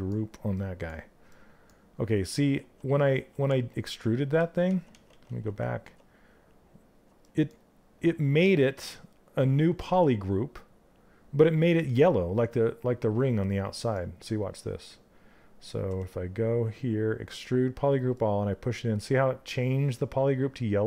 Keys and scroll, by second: 3.0 ctrl+z.